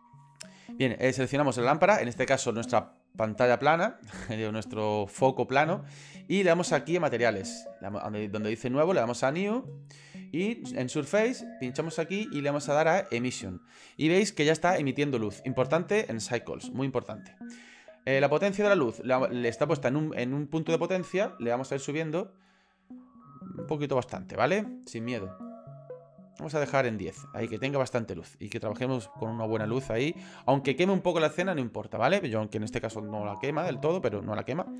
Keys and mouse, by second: 7.1 click, 8.8 click, 11.5-13.2 drag, 21.4 click, 25.3 click, 25.9 click, 26.1 click, 26.3 click, 26.5 click, 26.7 click, 27.7 middle click, 28.4 middle click, 29.2 ctrl+click, 29.3 ctrl+middle click, 29.3 ctrl+click, 29.7 ctrl+middle click, 30.0 shift+middle click.